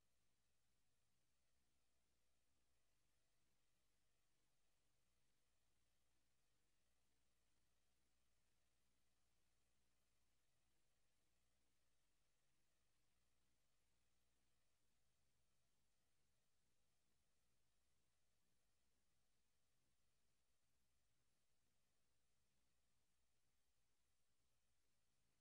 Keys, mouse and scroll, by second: 2.7 Escape, 5.1 click, 6.6 click, 11.0 click.